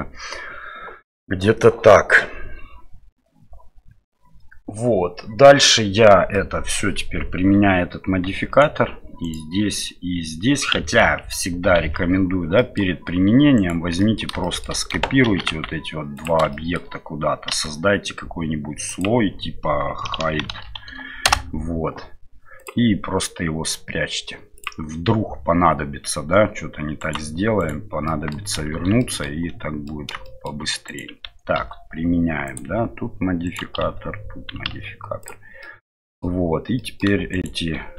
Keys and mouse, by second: 6.3 middle click, 8.2 ctrl+a, 9.2-10.7 right drag, 11.0 ctrl+z, 12.6 middle click, 13.5 shift+right click, 14.0 middle click, 14.4 shift+middle click, 15.2 shift+d, 16.6 middle click, 17.5 m, 24.5 click, 27.1 right click, 28.0 middle click, 28.7 shift+z, 29.0 middle drag, 29.9 middle click, 30.4 middle click, 30.9 right click, 31.6 ctrl+a, 33.4 right click, 35.6 middle click, 36.9 middle click, 37.3 middle click.